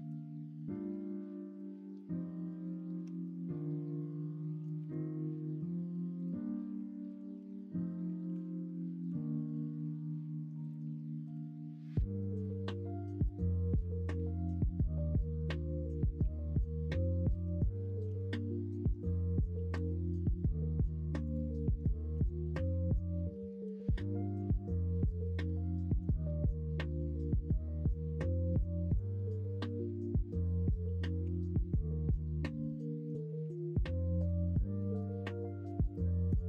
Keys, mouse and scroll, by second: 4.7 shift+a, 7.4 Tab, 8.3 s, 11.2 g, 12.6 middle click, 13.2-14.2 scroll down 1, 16.2 s, 18.0 s, 19.7 s, 21.4 scroll up 1, 21.6-22.8 middle drag, 23.3 s, 25.3 middle click, 26.0-26.3 scroll down 1, 29.4-30.3 scroll up 2, 30.3 middle click, 30.4-31.2 scroll down 1, 31.2 3, 33.8 click, 34.1 scroll up 1, 34.2 scroll down 1, 34.8 scroll up 1, 34.8 middle click, 34.9 scroll down 1, 35.2 Tab.